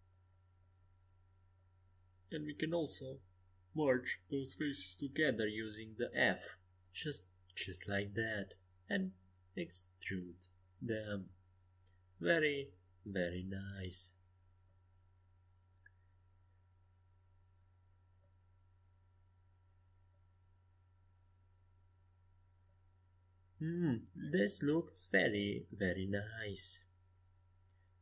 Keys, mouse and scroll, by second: 1.9 a, 2.4 c, 7.0 f, 8.3-9.5 middle drag, 9.2 e, 17.4 middle click, 18.3 a, 22.3-23.3 middle drag.